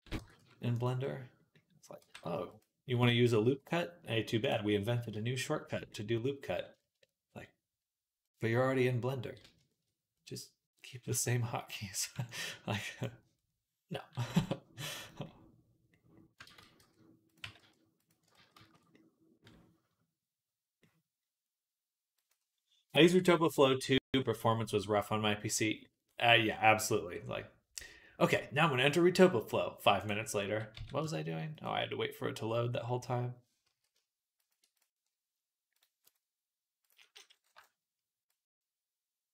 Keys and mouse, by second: 0.0 g, 1.8 g, 4.3-11.8 drag, 11.8-15.0 middle drag, 12.0 b, 14.2 s, 16.3 ctrl+z, 16.6 s, 17.2 g, 18.2 ctrl+z, 18.4 ctrl+z, 20.9-22.0 middle drag, 22.0 click, 22.1-32.7 middle drag, 30.6 s, 32.8-35.6 middle drag, 33.5 s, 35.6 click, 35.6-36.7 middle drag, 36.7-39.3 drag.